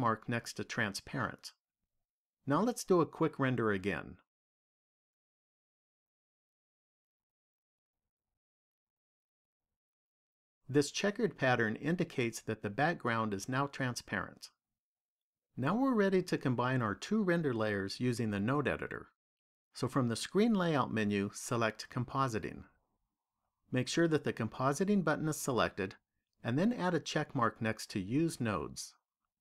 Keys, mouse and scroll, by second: 23.0 click, 28.5 click.